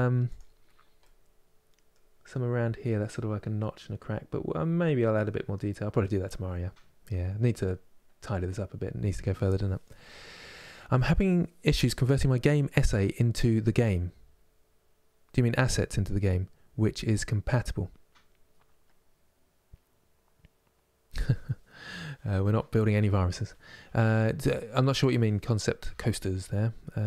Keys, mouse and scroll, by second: 0.0-3.3 middle drag, 3.3-4.5 scroll up 3, 4.5-7.9 middle drag, 7.9-27.0 scroll down 3.